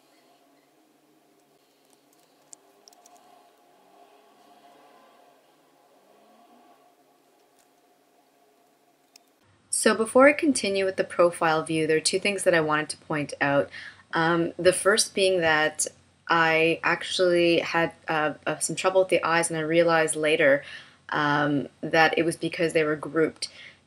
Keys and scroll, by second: 2.4 super+F9, 9.0 shift+m.